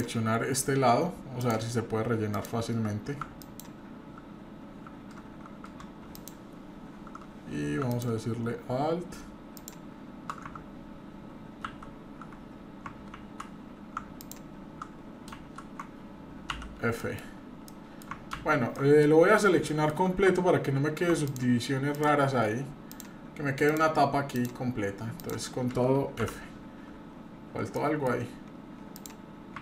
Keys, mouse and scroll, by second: 1.4 click, 2.3 click, 3.4 alt+click, 6.1 alt+shift+click, 7.9-10.3 alt+shift+drag, 11.7 ctrl+alt+z, 12.4 scroll up 1, 13.1 ctrl+z, 14.2 ctrl+alt+click, 15.3 ctrl+z, 17.0 middle click, 17.0 f, 17.4 scroll up 2, 17.7 middle click, 18.4 ctrl+z, 18.7 ctrl+middle click, 19.7 shift+middle click, 21.3 shift+click, 21.9 shift+click, 23.7-25.7 shift+drag, 26.2 f, 26.5-27.0 scroll down 3, 26.9-27.8 scroll up 2, 27.8 middle click, 27.8-28.1 scroll up 1, 28.9 click.